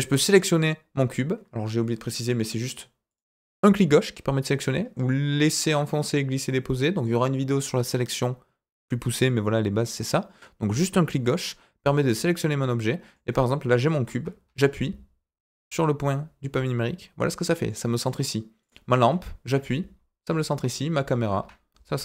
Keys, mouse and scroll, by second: 0.2 click, 2.1 click, 3.0 click, 4.7-6.0 drag, 9.1 click, 9.8 click, 10.6 click, 11.3 click, 12.5 click, 14.4 KP_Decimal, 15.5-16.4 scroll down 5, 17.6-18.0 middle drag, 18.6 click, 19.4 KP_Decimal, 20.6 click, 21.3 KP_Decimal.